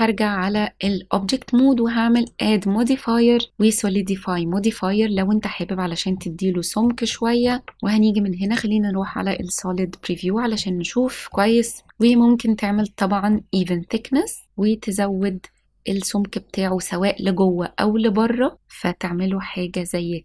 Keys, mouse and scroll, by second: 0.5-0.8 middle drag, 1.1 s, 2.1-3.9 drag, 6.1-6.8 middle drag, 6.7 l, 7.0-7.4 shift+middle drag, 7.6-7.9 scroll up 2, 8.4 click, 9.0 middle click, 10.5-11.2 middle drag, 11.9 click, 12.7-13.3 middle drag, 14.4-19.7 drag, 18.5 middle click, 18.5-18.9 scroll down 2.